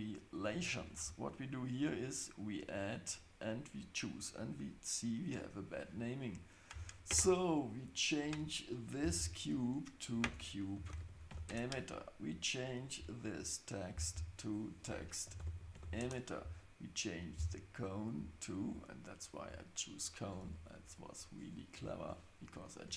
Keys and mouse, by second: 0.3-0.6 drag, 1.7 click, 3.0-6.4 drag, 9.3-12.0 drag, 11.1 t, 12.6 click, 14.2-16.6 drag, 15.6 t, 17.8 click, 18.8 click, 19.5-22.9 drag.